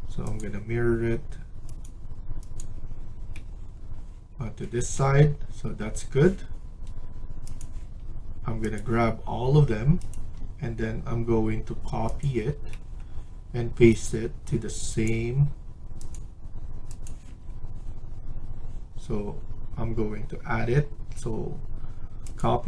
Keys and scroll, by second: 4.4 Escape, 4.6 Escape.